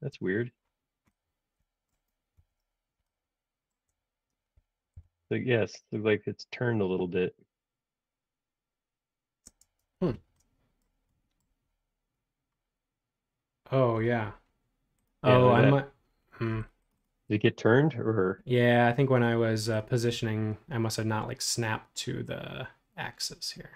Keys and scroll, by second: 2.3 super+1, 4.9 l, 9.6 space, 9.8 Escape.